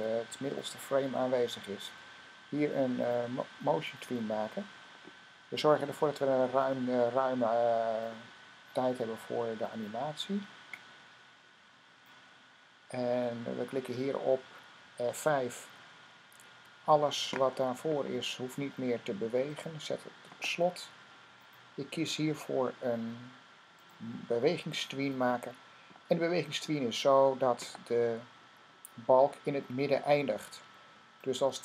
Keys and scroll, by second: 15.8 F5.